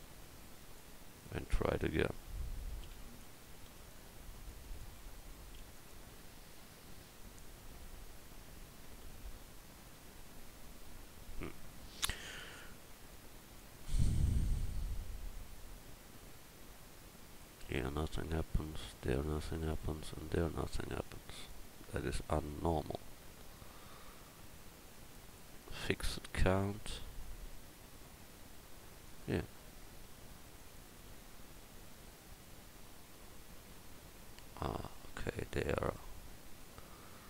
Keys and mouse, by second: 1.3-17.3 drag, 35.9-37.2 middle drag.